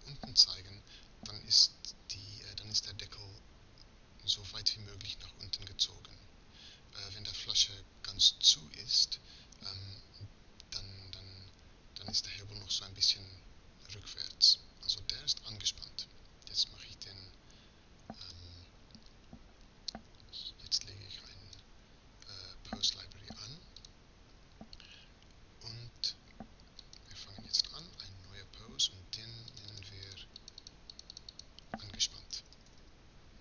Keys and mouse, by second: 18.8-20.1 drag, 20.9-31.8 drag, 31.8-33.4 middle drag.